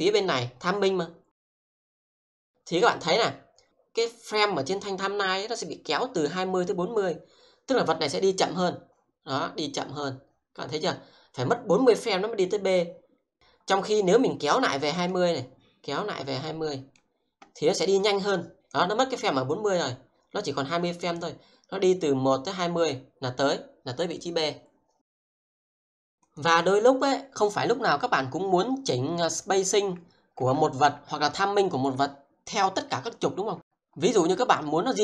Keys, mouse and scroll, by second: 26.0 click, 29.4 click, 30.9 w, 33.5 click.